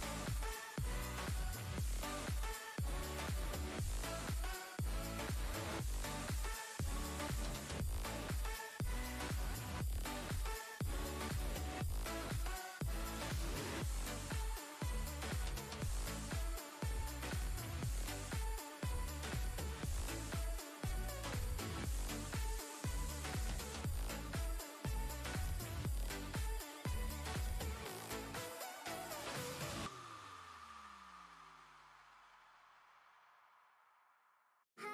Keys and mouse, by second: 6.4 right click, 8.1 click, 10.3 click, 11.0 right click, 12.3 click, 13.0 alt+Tab, 15.7-16.9 drag, 20.9 right click, 22.0-29.3 drag, 27.6-28.5 drag, 29.3 ctrl+g, 31.7-33.2 drag, 34.5 shift+space, 34.6-34.9 shift+click.